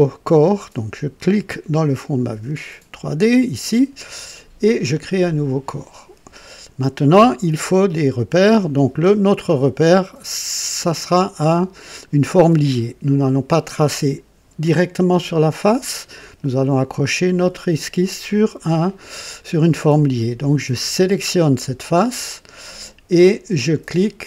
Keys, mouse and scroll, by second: 1.7 click, 3.3 click, 4.8 click, 20.4 click.